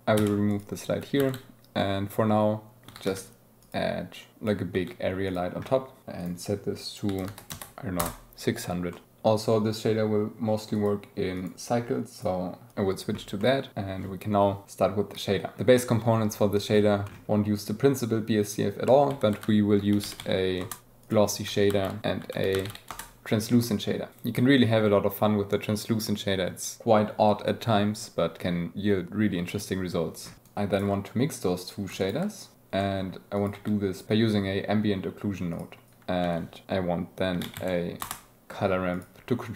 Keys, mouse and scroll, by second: 0.2 x, 1.2 shift+a, 3.4 g, 4.1 click, 5.3 click, 6.2-8.1 drag, 7.6 KP_0, 8.9 click, 9.0 z, 10.8-11.8 drag, 12.5-12.9 drag, 14.2-15.5 drag, 15.6 alt+a, 18.4 click, 19.1 ctrl+x, 19.3 shift+a, 21.1-21.5 drag, 30.3 g, 32.4 click, 32.5 g, 32.8 click, 33.4 click, 34.0 click, 34.4 shift+a, 36.0 shift+g, 36.2 shift+a, 39.0-39.5 drag.